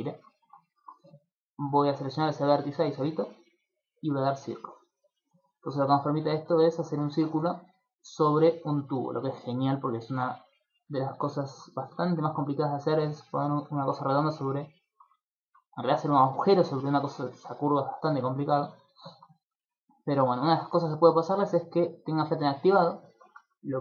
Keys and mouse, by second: 0.0 click, 0.4 shift+middle click, 0.6 ctrl+middle click, 1.5 right click, 4.0 click, 4.9 middle click, 5.4 shift+middle click, 5.8 middle click, 6.9 shift+middle click, 7.4 ctrl+middle click, 7.7 middle click, 8.3 ctrl+middle click, 8.7 shift+middle click, 9.0 ctrl+middle click, 9.3 middle click, 10.0 ctrl+middle click, 10.5 middle click, 11.3 ctrl+middle click, 11.8 shift+middle click, 12.3 ctrl+middle click, 14.3 middle click, 14.7 ctrl+middle click, 16.7 middle click, 17.1 ctrl+middle click, 18.1 shift+middle click, 18.5 ctrl+middle click, 18.7 middle click, 21.8 click, 22.7 click, 23.3 click, 23.3 middle click.